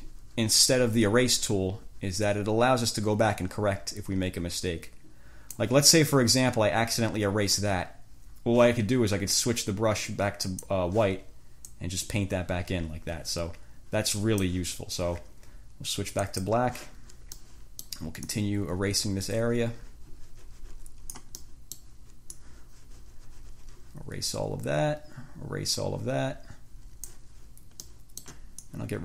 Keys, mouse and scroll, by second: 7.2 click, 10.6 click, 11.9-14.8 drag, 16.5 click, 17.6 click, 18.5-21.6 drag, 21.6 click, 22.6-27.5 drag, 28.0 click, 28.9-29.0 drag.